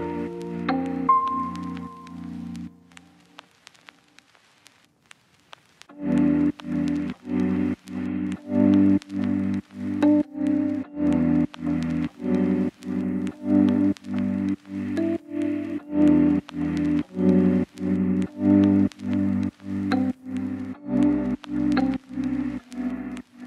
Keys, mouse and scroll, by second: 0.2 click, 1.7 scroll down 1, 1.7-2.3 scroll up 1, 2.3 right click, 3.3-5.3 scroll up 1, 5.3 click, 9.7 scroll down 1, 9.8 scroll up 1, 10.1 click, 11.8 right click, 13.7 click, 16.4 scroll down 1, 16.5-17.1 scroll up 1, 17.1 click, 19.3 right click.